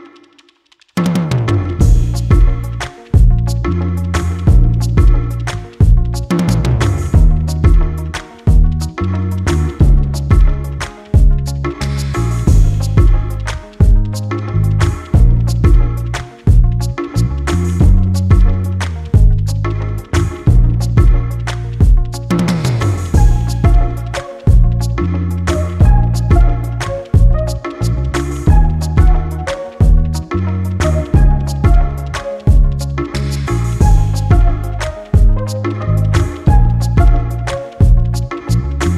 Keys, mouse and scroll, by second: 1.1-1.5 ctrl+scroll up 4, 2.6 ctrl+click, 6.1 ctrl+d, 7.3-9.1 ctrl+drag, 9.2-10.7 ctrl+drag, 11.8-17.6 ctrl+drag, 21.5 space, 22.0-22.4 ctrl+scroll down 2, 22.6 ctrl+space, 23.8 click, 24.6-25.1 ctrl+scroll up 4, 28.7-31.6 drag, 33.2 click, 34.9 shift+click, 36.4-37.6 drag.